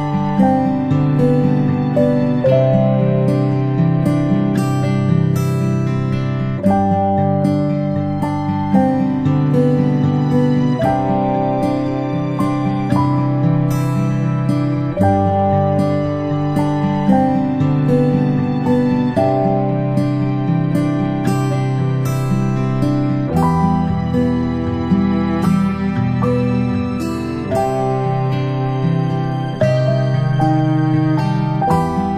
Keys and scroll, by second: 8.8-9.2 ctrl+space, 14.7 p, 22.8 ctrl+space, 25.9 space, 26.2 space.